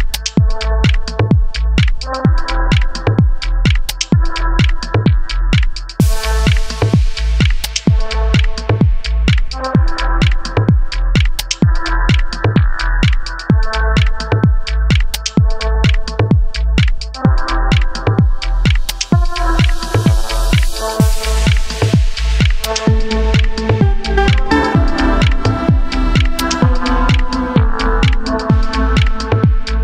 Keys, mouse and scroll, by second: 0.3 Escape, 0.6 ctrl+z, 1.1 click, 1.6-5.9 drag, 3.2 w, 3.4 e, 4.8 Escape, 5.9 middle click, 6.4-9.6 drag, 9.8-12.8 middle drag, 10.8 ctrl+z, 11.5 e, 12.8 click, 13.0 middle click, 13.7-15.5 right drag, 15.3 Tab, 15.5 click, 15.9 middle click, 16.2 click, 16.4-17.4 middle drag, 17.4 click, 17.7 scroll up 1, 17.9-21.5 middle drag, 18.4 Tab, 18.7 a, 19.1 e, 21.5 click, 22.5 s, 23.6 Escape, 24.5-26.9 middle drag, 25.3 s, 26.9 click, 27.4 g, 27.9-29.8 middle drag, 28.4 scroll down 1, 28.9 shift+a.